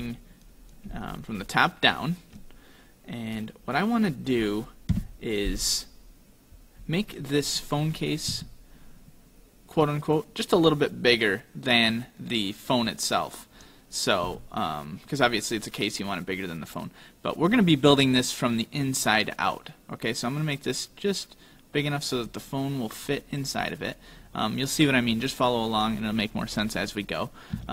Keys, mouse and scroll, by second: 1.2 shift+middle click, 3.5 middle click, 5.0 KP_7, 8.4 a, 10.0 click, 14.3 s, 23.1 click, 25.9 click, 27.6 s.